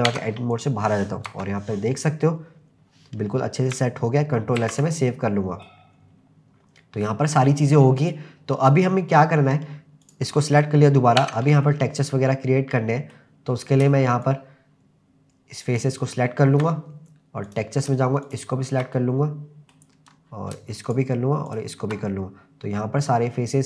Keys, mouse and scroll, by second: 0.5 click, 1.3 KP_0, 2.4-3.2 scroll up 4, 3.4-3.7 scroll down 3, 4.6 ctrl+s, 5.0-5.7 middle drag, 6.0-6.5 scroll up 4, 6.6-7.0 scroll down 2, 7.0-7.6 middle drag, 8.3-9.2 scroll down 1, 9.2-9.7 scroll down 1, 10.0 click, 11.2 Tab, 11.6-13.2 middle drag, 14.5-16.0 shift+drag, 17.5 click, 18.2 shift+click, 19.0 middle click, 20.2 scroll down 1, 20.9 shift+click, 21.5 shift+click, 22.1-23.6 middle drag.